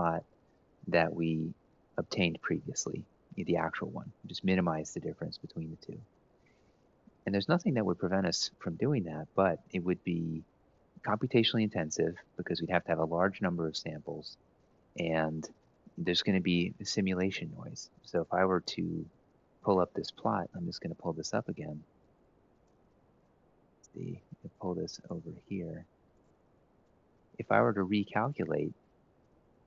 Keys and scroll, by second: 18.8 ctrl+shift+Right, 19.7-20.6 typing, 22.9 ctrl+x, 26.0 ctrl+v.